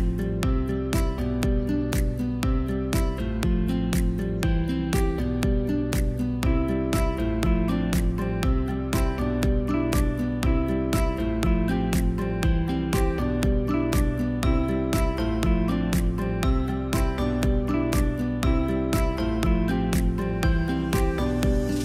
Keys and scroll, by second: 0.9 v, 7.9 v, 13.9 2, 14.0 5, 14.5 Return, 15.0 v, 15.9 space, 20.4 space.